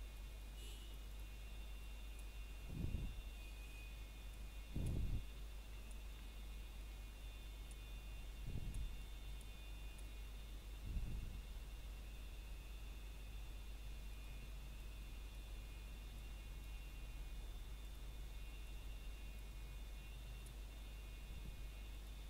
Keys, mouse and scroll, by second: 0.4 shift+middle click, 0.6 scroll up 1, 2.0 click, 3.5 scroll down 1, 3.9 shift+middle click, 4.1 scroll up 1, 5.2 e, 7.4 click, 10.0 s, 10.9 click, 12.0 click, 13.9 s, 15.7 click, 18.5 e, 20.3 click, 21.4 e.